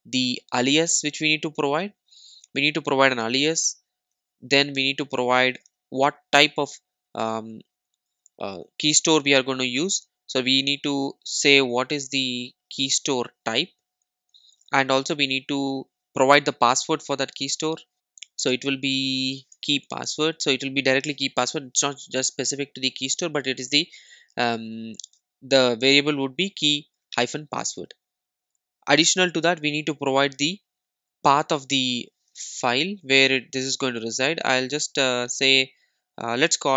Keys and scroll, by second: 4.1 super+d, 14.3 super+d, 17.9 super+s, 21.9 super+s, 29.5 super+d.